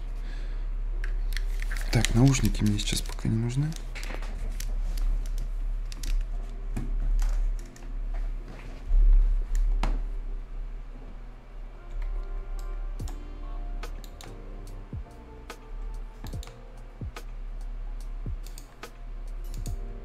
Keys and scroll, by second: 12.1 Escape.